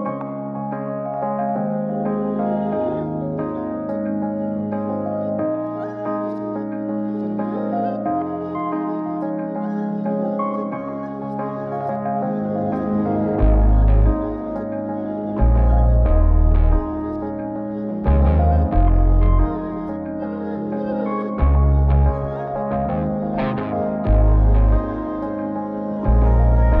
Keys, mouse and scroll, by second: 0.1-1.4 drag, 7.5 n, 9.3 click, 12.4 middle click, 12.7 scroll up 1, 12.8-13.3 scroll down 2, 13.3-13.7 middle drag, 13.7 scroll up 1, 13.8-14.9 scroll down 3, 14.9 n, 15.7 click, 16.2 shift+click, 16.7-17.7 middle drag, 17.9-18.4 shift+middle drag, 18.7 n, 20.1 click, 22.0 click, 23.4-25.7 drag, 26.1-26.8 drag.